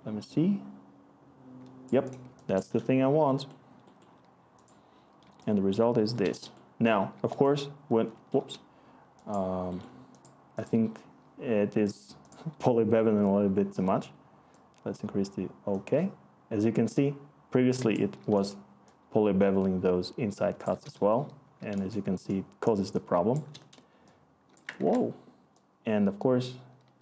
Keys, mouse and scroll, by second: 0.3-1.6 scroll, 5.4-6.8 scroll, 20.1-21.5 scroll, 24.7-27.0 ctrl+z.